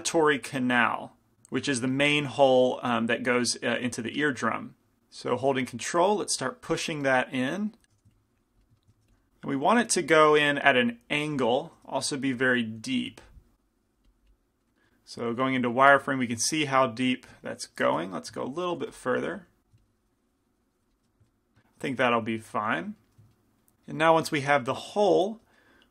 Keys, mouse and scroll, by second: 2.9 f, 5.9-7.7 drag, 8.0 f, 8.2 click, 8.6 middle click, 9.1 f, 10.2-12.5 drag, 11.4 f, 12.9 f, 13.4-15.3 drag, 15.3 z, 18.0 z, 19.0 f, 19.5 f, 19.9 click, 21.7 z, 22.3 z, 24.3-25.9 drag, 24.3-25.9 middle drag.